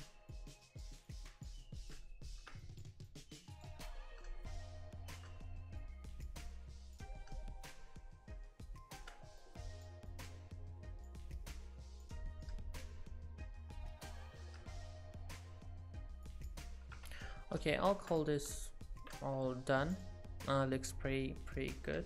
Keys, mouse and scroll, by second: 0.3 click, 1.1 click, 1.8 middle click, 2.6 click, 3.1 click, 3.8-4.2 scroll down 6, 4.2 middle click, 5.4-6.1 scroll up 3, 5.8 click, 6.5 click, 7.2 middle click, 9.4 click, 10.1 click, 12.2-12.5 scroll down 4, 12.4 middle click, 15.1 scroll up 4, 16.3 click, 17.0 Tab, 17.2-17.6 scroll down 5, 17.4 middle click, 18.1 click, 18.5 middle click, 20.0 click, 20.5-21.1 scroll up 2, 21.6 middle click.